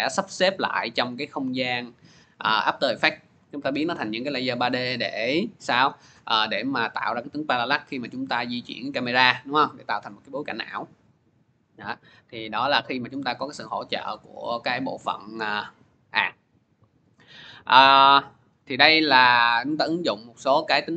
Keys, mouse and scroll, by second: 0.1 click, 0.5 click, 9.3 scroll, 9.8 scroll, 10.3 scroll, 11.6 click, 12.3 scroll, 12.8 click, 13.9 click, 18.3 click.